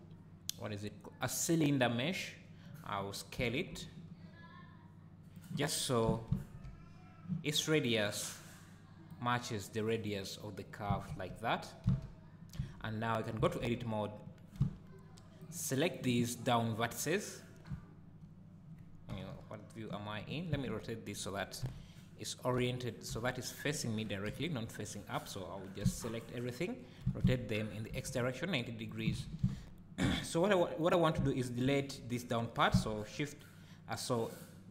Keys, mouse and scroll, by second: 3.4 s, 5.4 click, 6.1 g, 8.0 right click, 9.1-12.6 drag, 11.9 z, 12.6 Tab, 13.5 alt+a, 14.6 b, 19.1 KP_1, 20.5 Tab, 21.6 KP_1, 24.3-29.0 drag, 25.8 b, 27.0 r, 29.2 alt+a, 29.4 z, 30.8 click, 32.7 x.